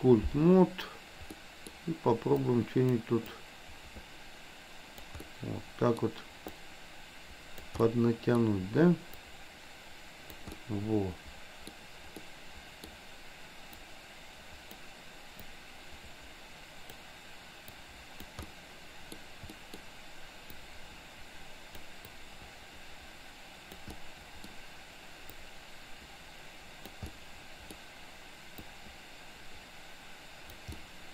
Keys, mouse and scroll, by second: 1.2 middle click, 2.5 click, 3.2-5.1 drag, 5.2 middle click, 6.6-7.7 drag, 7.9 middle click, 9.2-10.4 drag, 10.6-11.6 middle drag, 12.2 middle click, 13.7-14.9 drag, 15.5-17.0 drag, 17.7 click, 18.5 middle click, 19.6 middle click, 20.6-21.9 drag, 22.1-23.9 drag, 24.0 middle click, 25.5-26.9 drag, 27.1 middle click, 28.6-30.5 drag, 30.7-31.1 middle drag.